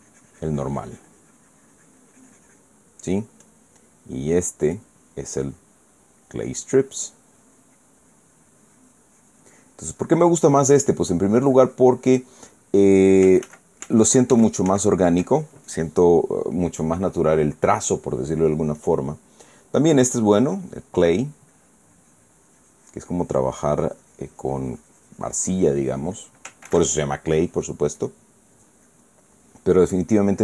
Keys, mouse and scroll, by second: 0.3-3.5 drag, 4.1 click, 5.4 click, 7.6-13.6 drag, 14.2 ctrl+z, 19.5 click, 21.1 click, 22.2-27.0 drag, 27.4 ctrl+z, 28.7 click, 29.6 click.